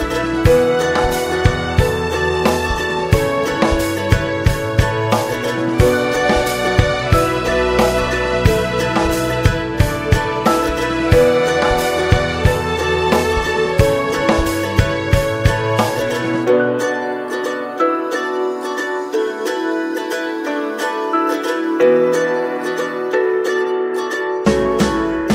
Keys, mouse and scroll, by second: 5.0 scroll down 1, 5.3 middle click, 5.6-6.3 scroll up 2, 5.9 shift+middle click, 6.3 middle click, 6.6 ctrl+s, 8.7-9.5 scroll down 2, 11.3-16.2 drag, 16.2 middle click, 16.8-24.0 drag, 24.0-25.3 middle drag.